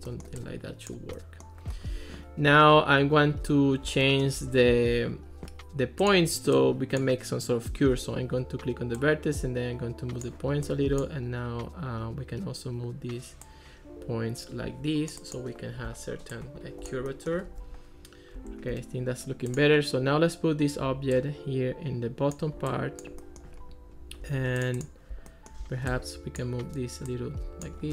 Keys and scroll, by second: 18.4 Escape.